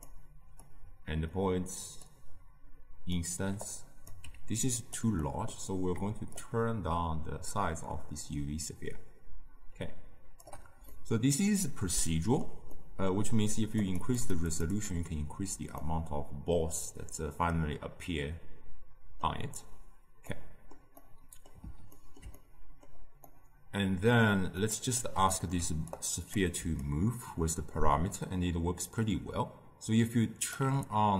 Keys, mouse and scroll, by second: 0.1-9.6 drag, 10.9-13.9 middle drag, 13.9-15.8 drag, 15.8-18.8 middle drag, 23.3-26.9 middle drag, 26.9-29.8 shift+drag.